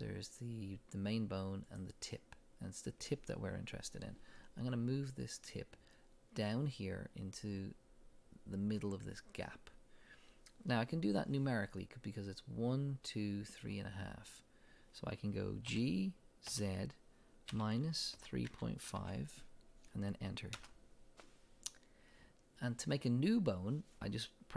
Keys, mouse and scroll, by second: 1.7 click, 15.7 g, 20.6 Return.